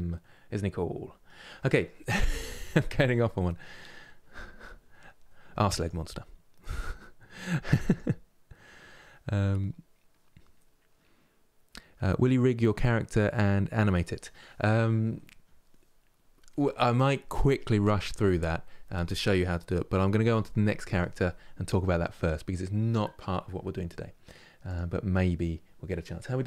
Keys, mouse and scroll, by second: 24.3-26.4 drag.